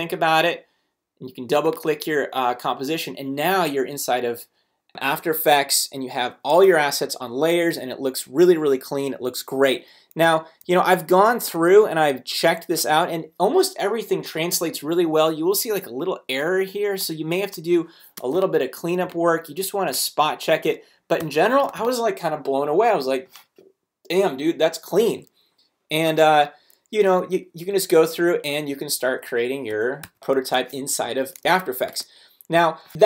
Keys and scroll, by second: 11.1 space, 18.2 space, 21.2 ,, 21.7 space, 27.5 super+Down, 28.7 super+Up.